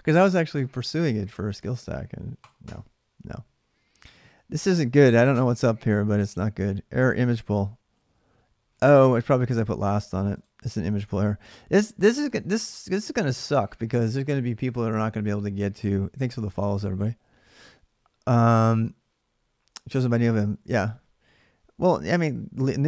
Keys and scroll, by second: 8.5 alt+Tab, 10.7 alt+Tab.